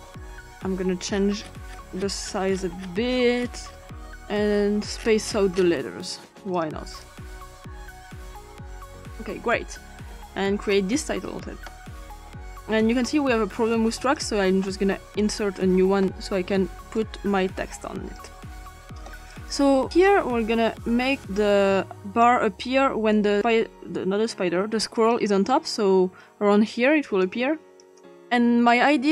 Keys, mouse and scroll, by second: 2.2-3.5 scroll up 1, 3.5-4.6 scroll down 1, 4.6-5.6 scroll down 1, 5.6-6.5 scroll up 1, 6.5 click, 7.0-9.6 drag, 10.7 click, 12.8 click, 15.2 click, 17.0-18.2 drag, 19.3 click, 20.0-21.2 drag, 22.0 click, 24.9 click, 27.2 click.